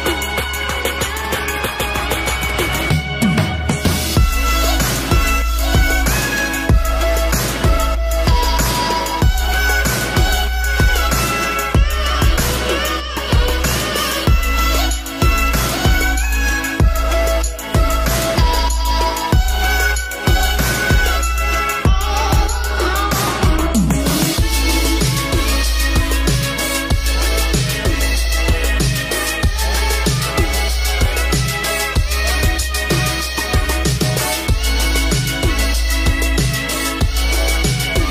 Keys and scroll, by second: 17.0 ctrl+space.